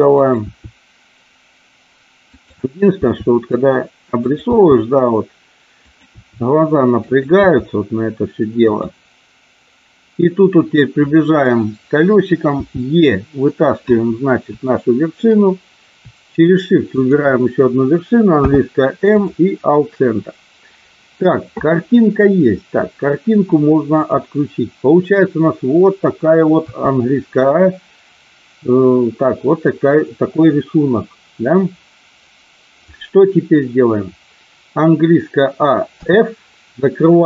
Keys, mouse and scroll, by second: 0.1 click, 0.5 e, 2.2 click, 3.0 e, 4.2 click, 4.5 e, 5.9 click, 6.0 e, 7.0 click, 7.4 e, 12.6 e, 13.3 click, 14.6 shift+middle click, 16.9 shift+click, 18.3 m, 24.0 click, 26.5 a, 36.0 f.